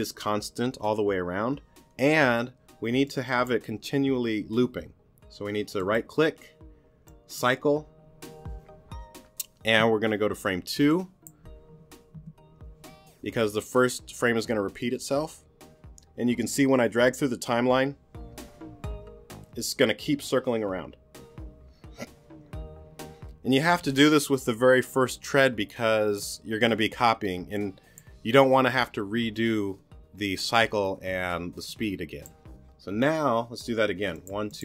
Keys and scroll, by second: 12.1 2.